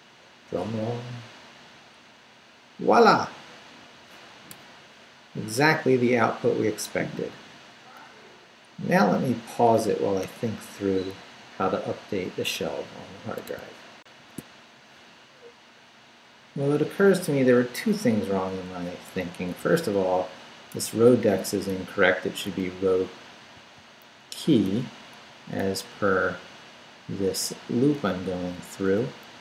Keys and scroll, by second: 14.0 alt+shift+super+z, 19.1 Left, 19.6 Right, 20.7 i, 21.1 BackSpace, 22.4 w, 23.5 k, 24.3 e, 24.6 y, 25.4 Up, 25.6 Left, 27.9 Up, 28.7 Left.